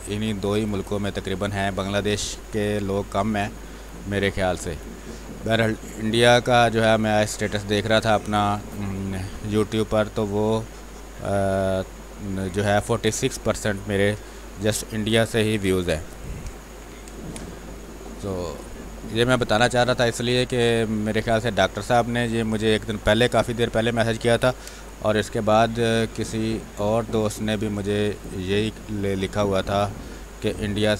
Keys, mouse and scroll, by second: 0.8 click, 1.1 space, 1.3-14.4 alt+drag, 14.4 r, 14.5-16.7 drag, 16.7 b, 17.1 space, 17.3-22.5 ctrl+drag, 22.5 space, 22.7 click, 23.0 space, 23.3 r, 23.5 click, 24.4 b, 24.6 space, 24.8 click, 25.1 space, 25.8-29.4 drag, 29.4 x, 29.7 click, 30.5 space, 30.9 click.